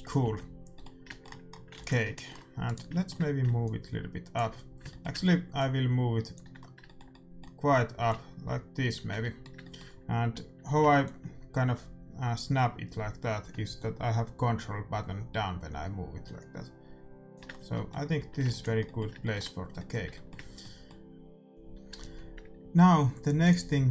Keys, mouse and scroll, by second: 0.1 shift+c, 1.7 ctrl+s, 2.6 middle click, 2.6-4.3 right drag, 3.5-7.4 drag, 4.3-11.7 middle drag, 8.0-9.9 drag, 10.9-12.8 drag, 17.6 middle click, 18.1 a, 18.4 ctrl+s, 18.8-21.5 middle drag.